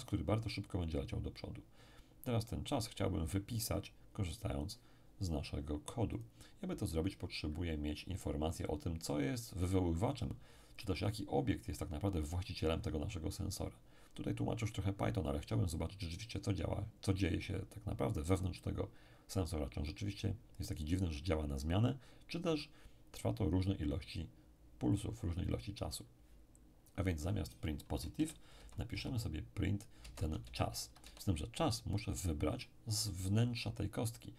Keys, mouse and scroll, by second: 3.0-5.5 drag, 6.1 click, 28.1 End, 28.5 Left, 28.9 Left, 30.0 Right, 30.4 ctrl+shift+Left, 31.0 Left.